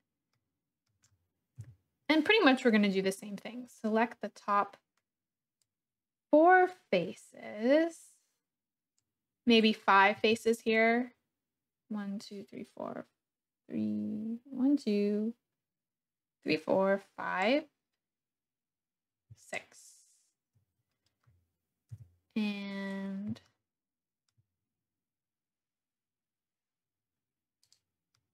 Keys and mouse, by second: 0.3 click, 1.6 KP_7, 5.6-10.2 drag, 10.2 3, 10.7-13.2 drag, 13.2-17.4 middle drag, 19.5-20.5 shift+drag, 21.9 KP_1, 23.4 shift+middle click, 27.7-28.3 middle drag.